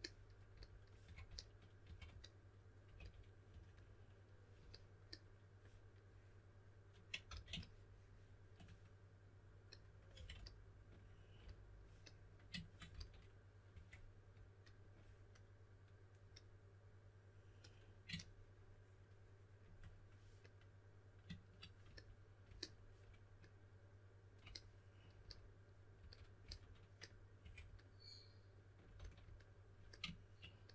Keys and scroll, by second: 0.8-3.9 typing, 7.2 s, 10.1 2, 12.9-13.7 typing, 25.7-27.4 typing, 28.9 s.